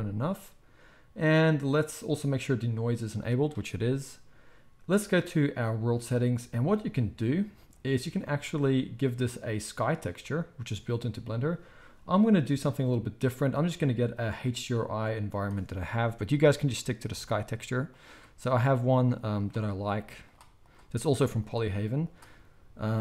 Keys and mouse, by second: 5.3-7.6 right drag, 7.6-15.4 drag, 16.0-17.9 drag.